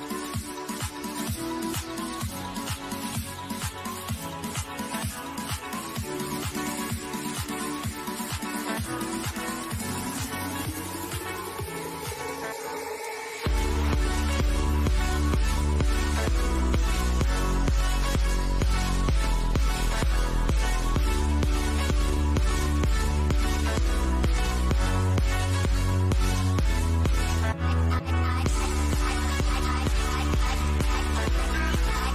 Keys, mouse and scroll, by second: 1.8 ctrl+z, 4.0 ctrl+z, 5.8-11.2 drag, 12.2 click, 16.0 click, 17.5-22.0 middle drag, 23.5 click, 28.2-32.1 drag.